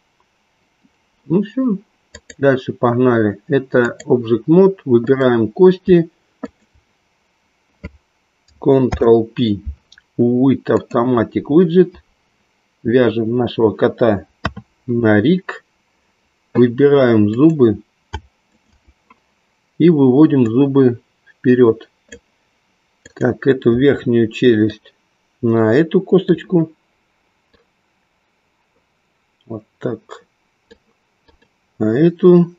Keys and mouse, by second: 2.6-4.0 drag, 5.1 click, 6.4 shift+click, 9.8 ctrl+p, 14.4 KP_3, 17.2 click, 18.5 shift+click, 20.6-23.4 drag, 24.7-26.4 drag, 28.5-31.0 drag, 31.4 click.